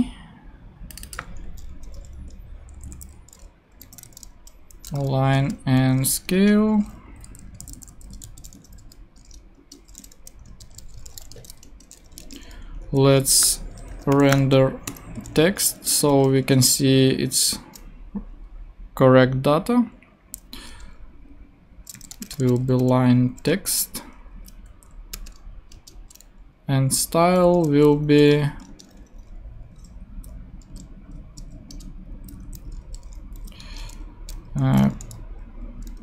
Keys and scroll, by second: 2.0 shift+[, 2.7 shift+Left, 3.7-5.3 typing, 6.3 Return, 7.0 Down, 7.2 Left, 8.2 alt+shift+super+x, 8.8 shift+super+9, 9.3-14.9 typing, 9.6 shift+Return, 21.7-23.1 typing, 23.5 Return, 24.3 Up, 24.6 Left, 25.1 space, 25.7 Return, 28.3 shift+[, 28.7 shift+Return, 29.4 Return, 30.7 \, 31.4 BackSpace, 31.7 Return, 32.1 Down, 32.4 alt+shift+Left, 32.8 alt+shift+BackSpace, 33.3 Up, 33.6 Tab, 34.6-35.4 typing.